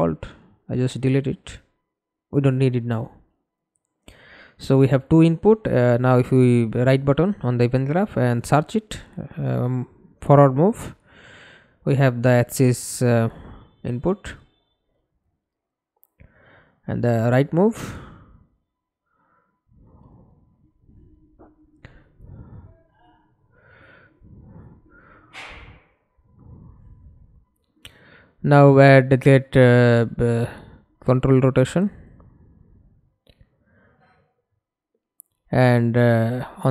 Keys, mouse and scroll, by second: 2.7 right click, 6.0-9.6 typing, 9.7 Up, 9.8 Up, 11.2 Return, 12.2 right click, 12.8 right click, 13.7-16.4 typing, 16.6 Up, 16.8 Up, 17.0 Up, 18.4 Down, 18.8 Return, 21.0 right click, 22.5 typing, 25.2-27.9 typing, 27.9 Return, 30.8 a, 31.4 d, 32.4-34.6 typing, 34.7 Return.